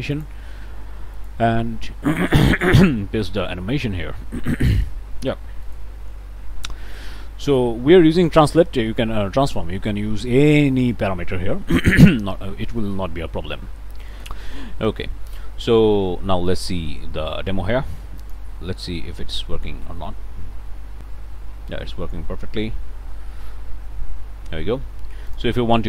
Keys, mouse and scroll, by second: 0.1 click, 1.2 click, 2.4 click, 3.5-4.1 scroll up 2, 4.2-5.9 drag, 6.5 scroll up 1, 6.7-7.8 drag, 8.2 scroll up 1, 14.1 click, 15.8-16.2 scroll up 1, 16.4 click, 17.0 scroll up 1, 18.2 click, 25.3 click.